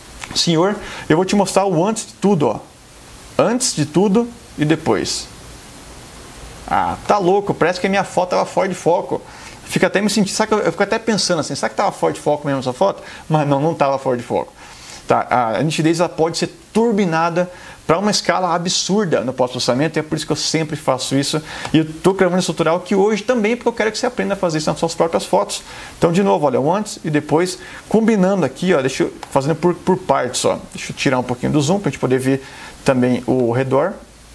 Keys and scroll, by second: 31.2 super+-, 33.4 super+space.